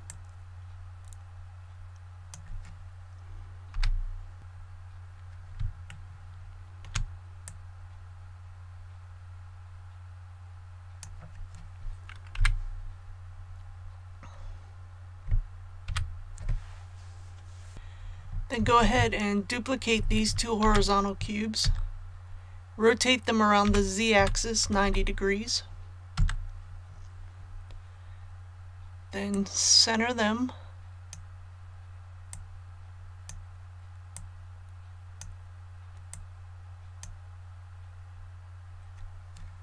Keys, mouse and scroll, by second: 0.0-3.0 drag, 3.7 KP_7, 4.5 scroll up 1, 5.9 shift+middle click, 7.4-11.2 drag, 12.3 KP_1, 13.3 scroll down 1, 15.9 a, 17.7 ctrl+z, 20.6 shift+d, 23.6 r, 24.2 z, 24.6 KP_9, 24.8 KP_0, 29.3-37.1 drag.